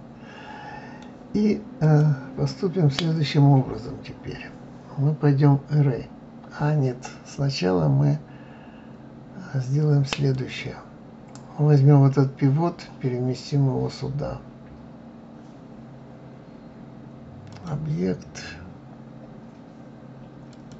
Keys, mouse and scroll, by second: 1.8 click, 10.3 click, 17.5-20.5 drag.